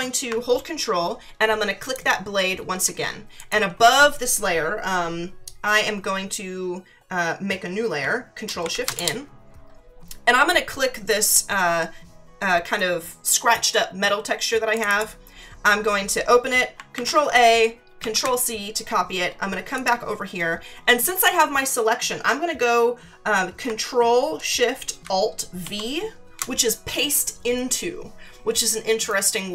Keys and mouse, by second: 1.8 ctrl+click, 3.4 click, 8.6 ctrl+shift+n, 8.9 Return, 14.7 click, 16.9 ctrl+a, 18.0 c, 19.7 click.